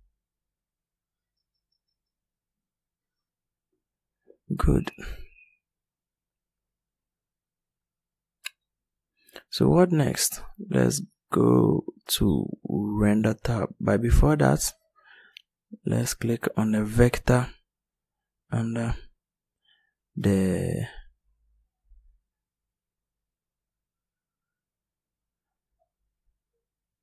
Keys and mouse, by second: 19.4 click.